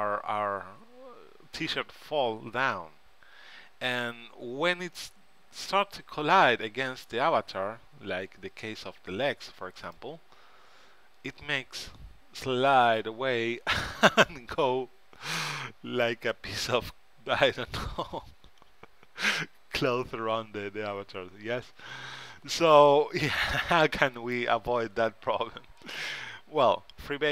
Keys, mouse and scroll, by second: 10.1-11.8 right drag, 23.7-26.8 middle drag.